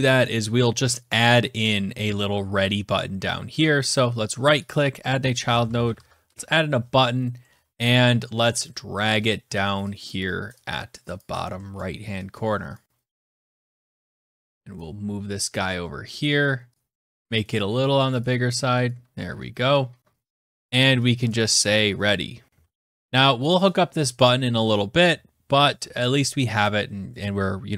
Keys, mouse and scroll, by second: 0.8 click, 1.3-2.1 scroll, 3.6 right click, 4.4 click, 4.9-6.2 typing, 7.1-8.7 scroll, 8.7-9.8 scroll, 9.8 click, 10.9 click, 11.3-12.0 scroll, 12.5 click, 12.9 click, 13.4 click, 13.8 scroll, 14.4 click, 15.9 click, 16.7 click, 18.5 click, 20.2 click, 20.9 click, 21.9-22.9 typing, 23.0 Return, 23.0 click, 23.2 click.